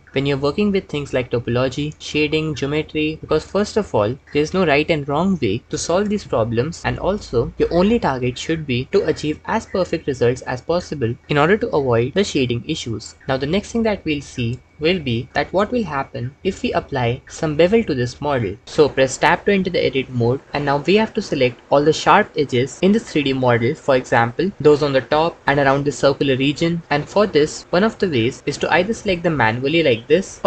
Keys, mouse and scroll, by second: 11.8 Tab, 20.1 Tab, 29.0 click.